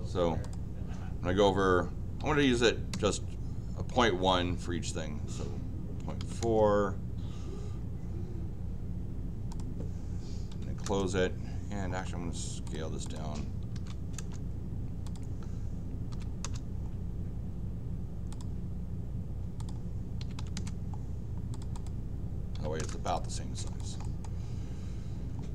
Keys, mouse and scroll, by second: 0.4 click, 9.5 click, 10.5 c, 10.8 Return, 11.9 middle click, 12.6 click, 13.0 click, 13.4-14.2 typing, 15.0 click, 16.1 r, 16.4 Return, 16.8 middle click, 18.3 click, 19.6 click, 20.9 middle click, 21.5 click, 21.7 click, 22.5 m, 22.8 Return, 23.0 click, 23.6 click, 24.0 middle click, 24.5 scroll up 1, 25.3 scroll up 1.